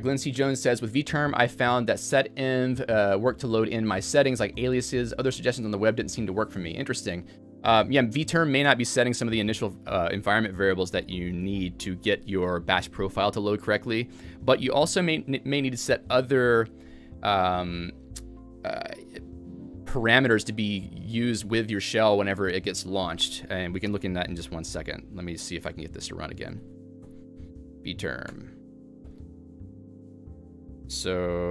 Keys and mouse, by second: 10.6-11.4 typing, 13.3-19.7 typing, 22.2-22.9 typing, 25.1-25.8 typing, 27.5-30.5 typing, 28.4 Return.